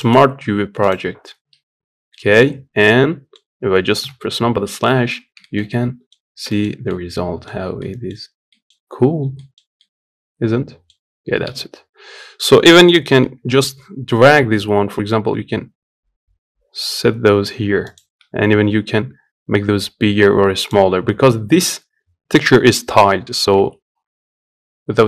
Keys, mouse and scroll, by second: 0.6 u, 1.9 middle click, 2.3 Tab, 2.5-3.8 middle drag, 3.8 KP_Divide, 4.4 scroll up 1, 4.6 middle click, 4.9 scroll up 3, 5.2 shift+middle click, 5.9-6.2 scroll up 3, 6.2-7.2 shift+middle drag, 7.2-7.5 scroll down 3, 7.5 middle click, 7.9 scroll up 3, 8.1 scroll down 1, 8.2 middle click, 8.5-8.9 scroll up 1, 8.9 scroll down 2, 9.1-10.9 middle drag, 10.9 scroll down 2, 11.2 Tab, 18.0 s.